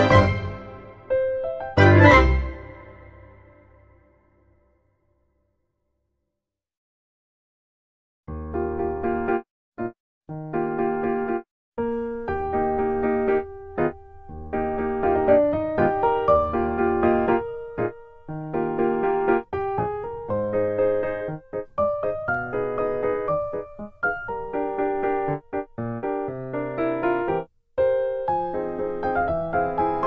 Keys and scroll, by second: 0.3 Tab, 1.9 ctrl+z, 2.7 ctrl+z, 8.8 Tab, 9.9 Delete, 15.1 Tab, 16.2 Tab, 18.1 ctrl+t, 25.5 Tab, 26.4 ctrl+z, 29.4 ctrl+z.